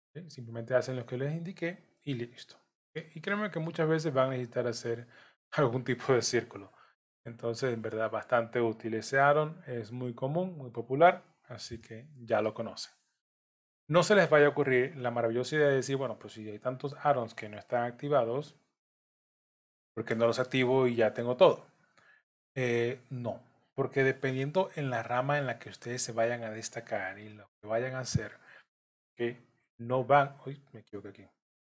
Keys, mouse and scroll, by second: 0.2 click, 0.9 shift+click, 2.1 j, 2.5 middle click, 3.3 shift+middle click, 3.8 scroll up 4, 4.8 click, 6.0 shift+click, 6.6 j, 7.4 click, 8.1 shift+click, 9.1 j, 9.7 click, 10.5 shift+click, 11.4 j, 11.8 middle click, 13.2 click, 13.9 shift+click, 15.0 j, 15.9 click, 16.9 shift+click, 17.8 j, 18.4 middle click, 19.4 click, 20.2 shift+click, 21.1 j, 22.2 click, 23.1 shift+click, 24.2 j, 25.1 click, 26.1 click, 27.1 j, 27.9 click, 28.6 shift+click, 29.6 j, 30.6 ctrl+z, 31.6 click.